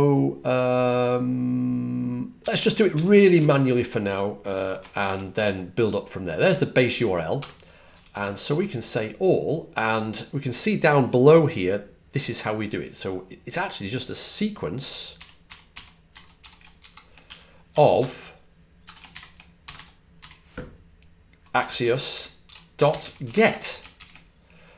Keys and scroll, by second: 2.5-4.4 typing, 7.7-8.7 typing, 14.4-20.1 typing, 21.2-23.8 typing.